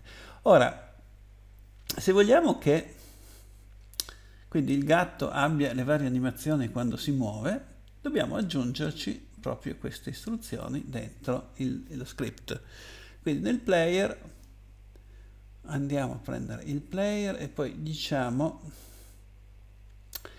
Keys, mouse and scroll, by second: 10.4 click.